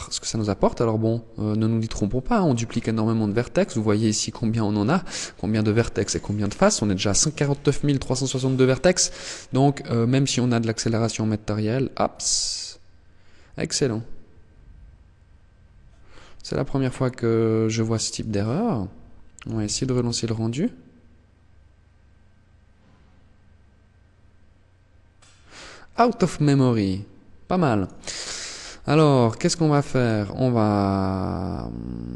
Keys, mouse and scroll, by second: 15.8 click, 18.4 click, 26.8 click, 28.3 right click, 29.1 right click, 31.6 right click.